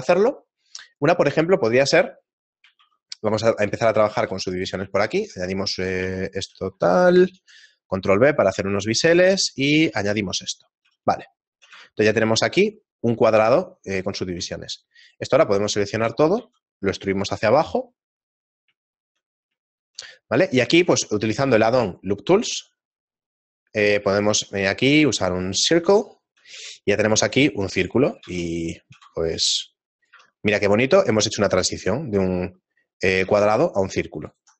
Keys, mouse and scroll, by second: 1.5 shift+middle click, 2.8 ctrl+2, 4.3 ctrl+r, 5.9 ctrl+r, 6.3 alt+shift+right click, 7.4 ctrl+b, 11.3 shift+middle click, 12.2 Tab, 13.3 Tab, 14.7 alt+right click, 15.0 alt+right click, 16.1 e, 18.9 shift+middle click, 19.5 middle click, 20.8 w, 26.1 shift+middle click, 26.7 s, 28.3 ctrl+r, 30.1 Tab, 30.6-31.1 scroll down 3, 31.1 shift+middle click, 33.8 Tab, 34.3 alt+right click.